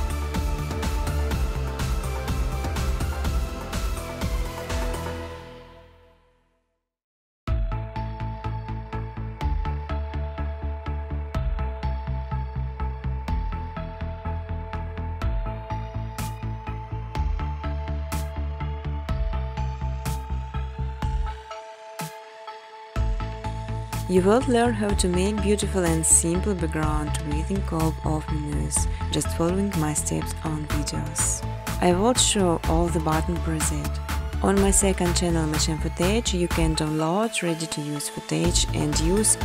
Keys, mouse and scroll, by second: 0.5 click, 1.0 click, 2.1 click, 2.1 right click, 2.9 click, 3.7 click, 4.4 click, 5.2 click, 6.2 click, 7.2 click, 8.5 click, 10.7 shift+click, 12.8 shift+click, 13.5 click, 16.2 shift+click, 16.6 space, 17.4 space, 23.7 shift+click, 32.3 shift+click, 33.6 shift+click, 35.8 shift+click, 36.1 space, 37.4-39.1 typing.